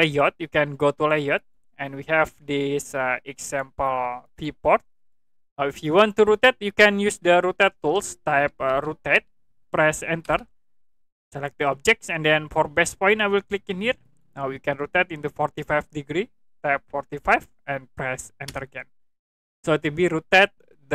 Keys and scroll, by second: 8.4 r, 8.7 o, 10.2 Return, 17.1 4, 17.2 5, 18.4 Return.